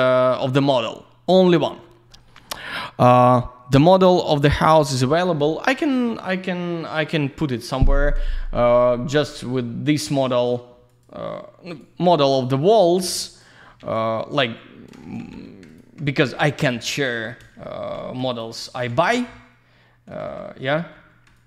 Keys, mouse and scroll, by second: 3.1 alt+middle click, 9.1 click, 10.9 ctrl+click, 13.3 ctrl+click, 15.0 alt+shift+q, 15.8 ctrl+click, 16.7 typing, 17.3 scroll down 1, 17.6 alt+middle click, 18.3 ctrl+click, 18.7 alt+q, 19.1 alt+middle click, 20.2 alt+shift+Tab, 21.3 ctrl+click.